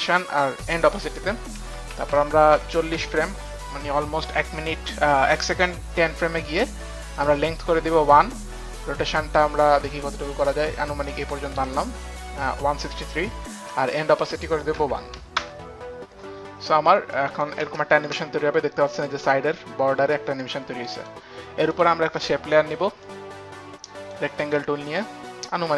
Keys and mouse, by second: 2.0 shift+Page_Down, 2.6 shift+Page_Down, 3.2 shift+Page_Down, 6.2 shift+Page_Down, 9.6 click, 14.8 click, 14.8 KP_1, 15.3 click, 15.3 KP_1, 17.1 click, 18.0 space, 21.0 click, 21.4 click, 21.4 space, 21.7 click, 23.0 click, 25.0 click, 25.4 click.